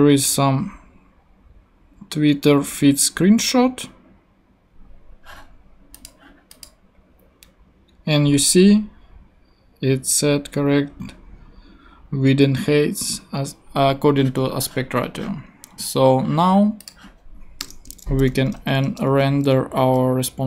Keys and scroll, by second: 17.6 Return, 18.3 shift+[, 18.8 shift+Return, 19.4 Return.